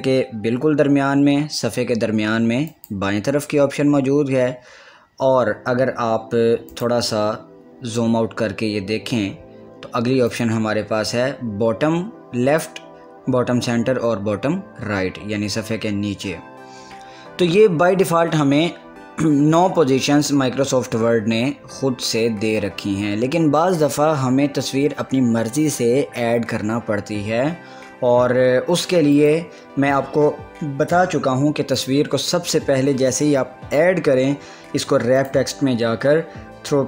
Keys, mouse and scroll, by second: 2.9 click, 3.6 scroll up 1, 3.8 scroll down 1, 4.2 scroll up 1, 4.2-4.7 scroll down 2, 6.9 click, 8.1 scroll down 1, 10.5 click, 29.3 click, 29.4 click, 32.0 click, 35.4 click, 35.5 click.